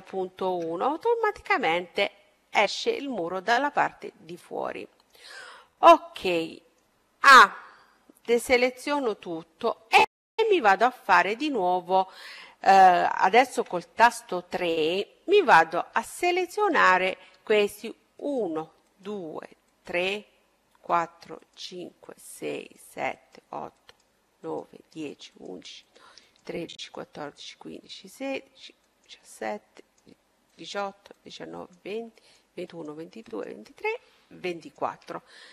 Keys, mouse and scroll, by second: 1.8-4.7 middle drag, 5.8-7.4 middle drag, 7.6 a, 8.4-11.3 middle drag, 12.5 KP_3, 15.0-16.2 middle drag, 17.1-35.5 right drag, 35.0-35.5 middle drag.